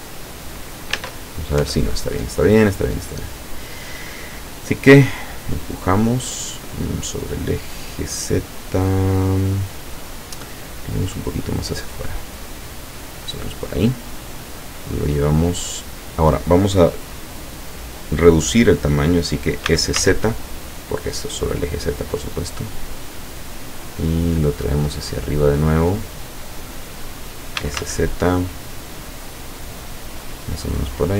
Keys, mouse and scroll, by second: 1.0 Tab, 2.2 Tab, 2.6 middle click, 3.3-4.7 middle drag, 5.4-10.0 drag, 7.9-10.0 middle drag, 11.1 click, 19.7 s, 20.0 z, 23.1 click, 24.1-27.2 drag, 27.6 s, 27.8 z, 30.3 click, 30.6 middle click.